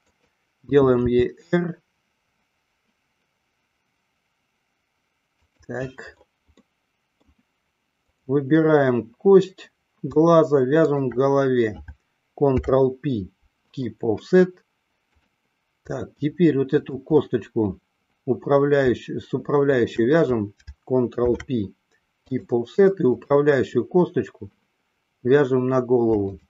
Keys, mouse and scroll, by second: 0.2 click, 1.3 r, 6.7 middle click, 8.3 click, 12.5 ctrl+p, 15.2 click, 16.4 middle click, 19.8 shift+click, 21.3 ctrl+p, 23.3 click.